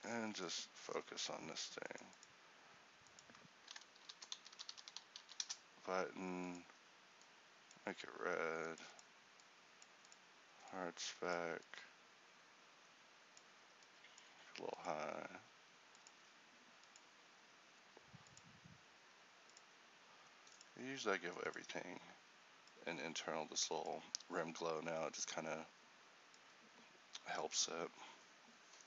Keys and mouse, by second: 4.8 t.